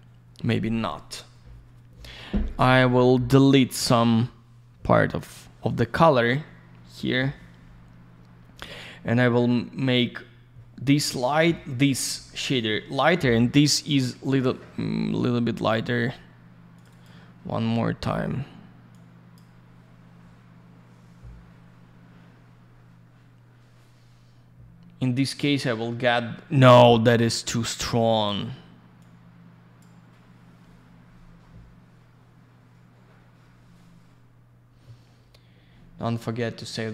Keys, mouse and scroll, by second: 2.1 middle click, 3.4 click, 5.1 click, 5.3 click, 15.1 middle click, 16.7 click, 16.8 click, 16.9 click, 17.0 double click, 18.9 click, 26.2-27.1 scroll up 1, 27.5 click, 29.0 click, 36.2-36.9 scroll down 1.